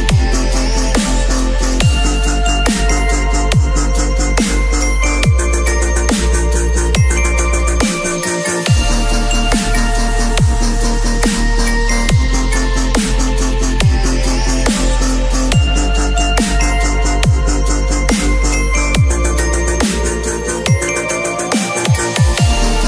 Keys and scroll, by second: 8.8 space, 10.4 alt+shift+s, 12.5 space, 12.8 ctrl+a, 13.0 ctrl+c, 13.2 ctrl+w, 13.5 ctrl+v, 18.1 space, 21.2 b.